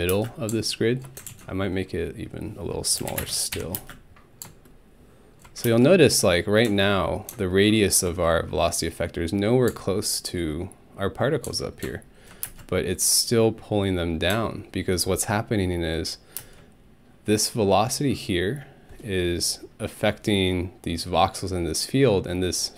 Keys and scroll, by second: 0.1 space, 2.7-3.8 typing, 5.6 alt+space, 12.5 ctrl+alt+space, 16.4 space.